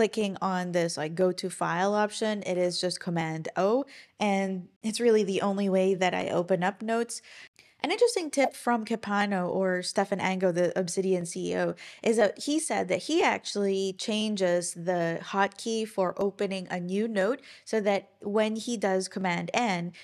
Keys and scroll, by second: 2.5 super+o, 7.5 ctrl+super+r.